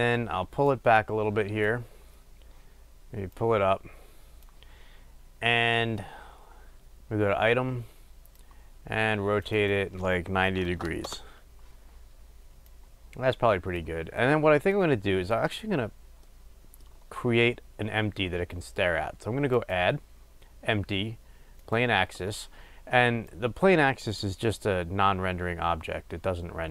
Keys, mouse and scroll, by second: 0.8-16.4 drag, 11.2 Return, 16.4-21.8 middle drag, 16.9-19.6 scroll, 21.8-26.5 drag, 26.5-26.7 middle drag.